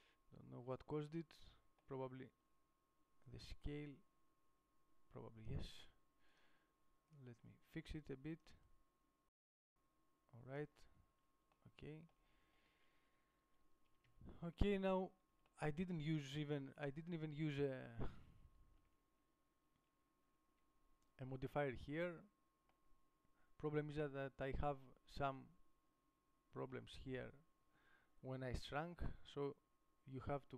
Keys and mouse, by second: 7.9-8.9 middle drag, 11.4 Tab, 14.3 KP_7, 16.8 Tab, 18.4 a, 26.2 middle click, 26.9-28.8 middle drag, 28.8 KP_7.